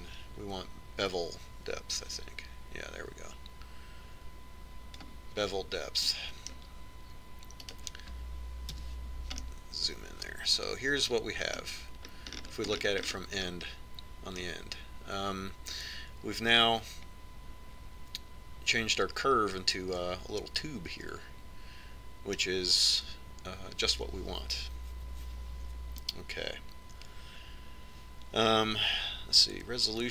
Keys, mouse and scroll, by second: 2.7-4.6 drag, 7.7-9.3 middle drag, 9.3-11.1 right drag, 10.4 KP_Decimal, 13.8-16.1 scroll up 1, 16.1-17.9 middle drag.